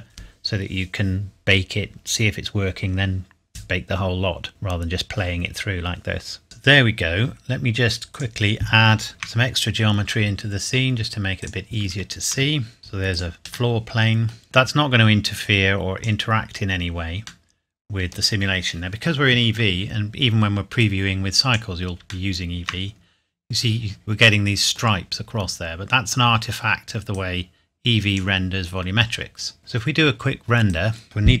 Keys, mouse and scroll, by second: 6.4 click, 8.7-9.1 scroll down 1, 9.1 shift+a, 11.4 click, 12.3 s, 12.8 g, 13.1 click, 13.7 middle click, 14.8 click, 17.4 middle click, 18.1 scroll up 1, 20.8 click, 22.3 shift+middle click, 23.0-23.4 scroll up 1, 24.4 middle click, 25.8-27.1 scroll down 1, 27.1 click, 30.6 click, 31.0-31.4 scroll down 1.